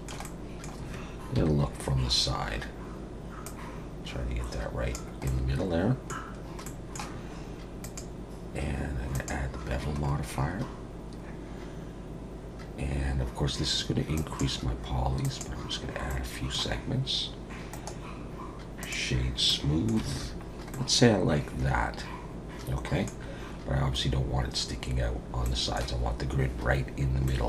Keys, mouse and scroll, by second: 0.2 middle click, 1.4 KP_1, 3.4 click, 5.3 middle click, 6.2 scroll down 2, 6.6 middle click, 7.8 click, 10.0-10.7 scroll up 4, 14.1 click, 15.2 click, 16.1 middle click, 17.7 right click, 19.5 middle click, 20.1 alt+a, 20.4 scroll down 2, 20.7 middle click, 23.2-23.5 scroll down 3, 25.4 middle click, 27.3 middle click.